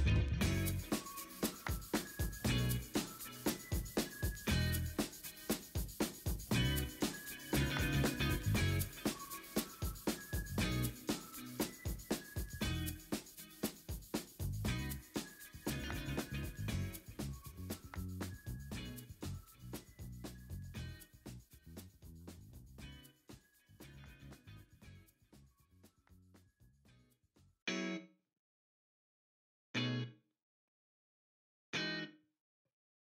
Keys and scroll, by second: 0.0 4, 0.5 v, 2.9 ctrl+i, 4.3 b, 4.6 x, 8.9 ctrl+d, 9.2 ctrl+d, 9.3-10.1 typing, 10.7 ctrl+d, 12.8 v, 14.8 ctrl+a, 15.0 ctrl+t, 15.4 Escape, 15.8 Escape, 16.0 ctrl+d, 16.1 ctrl+t, 16.1 v, 16.8 v, 17.1 ctrl+a, 19.3 ctrl+d, 19.9 w, 20.1 ctrl+d, 20.5 ctrl+d, 21.9 w, 24.3 x, 24.5 alt+BackSpace, 24.7 ctrl+d, 25.7 v, 26.1 Return, 26.8 ctrl+u, 31.1 Return, 32.8 Down, 32.9 Down.